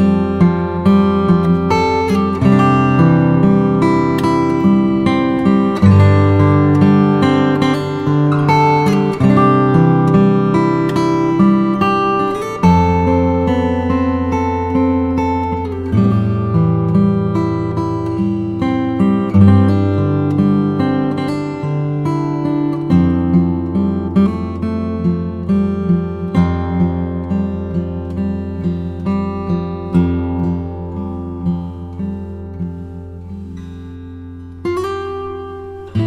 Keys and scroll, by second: 1.0 Return, 9.2 Return, 10.9 super+m, 30.4 b, 31.5 ], 33.9 3.